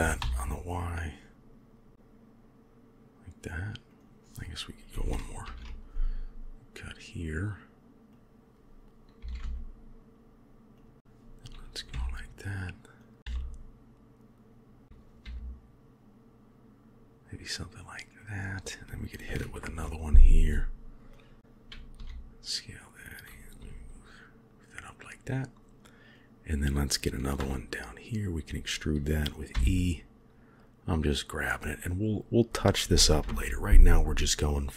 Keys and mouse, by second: 5.3 ctrl+r, 9.1 s, 11.0 g, 11.8 e, 13.2 s, 14.8 s, 15.1 g, 19.5 ctrl+r, 21.8 s, 23.5 g, 26.2 click, 27.3 e, 29.4 g, 33.1 ctrl+r.